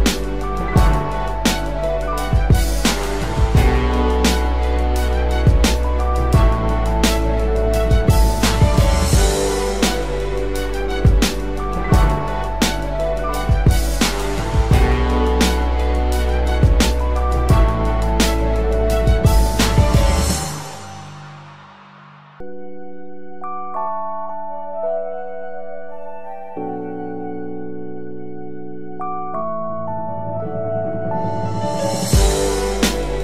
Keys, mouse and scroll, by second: 4.1-5.9 scroll up 1, 9.6 ctrl+t, 12.1 alt+shift+click, 16.1 Return.